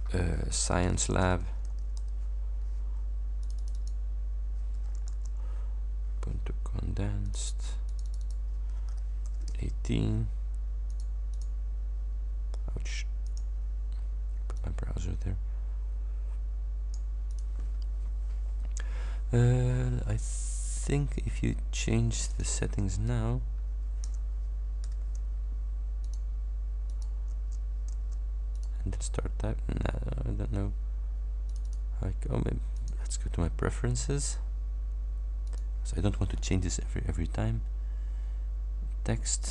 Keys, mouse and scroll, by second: 0.8 shift+s, 1.8 shift+l, 3.5 click, 4.8-5.7 typing, 7.4 click, 8.0 click, 9.6 shift+Return, 11.0 click, 11.4 click, 13.3 click, 14.6-17.2 drag, 17.4 click, 20.8 click, 22.2 click, 24.2 BackSpace, 24.9 c, 26.1 click, 27.0 click, 27.4 Return, 28.6 click, 31.5 click, 32.8 click, 35.5 click, 38.8 scroll down 1, 39.4 click.